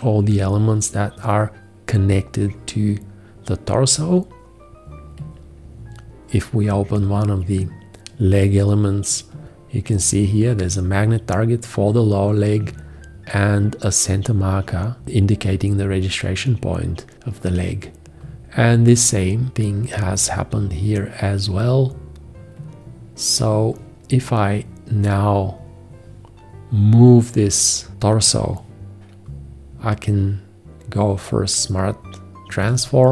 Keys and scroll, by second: 32.6 1.